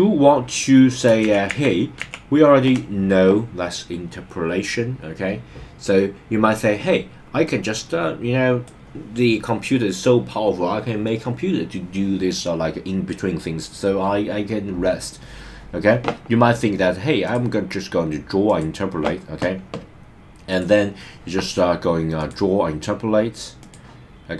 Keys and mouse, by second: 1.4 super+z, 2.0 shift+super+z, 7.4-8.6 drag, 17.2-18.6 drag, 20.5 click, 22.2-23.8 drag.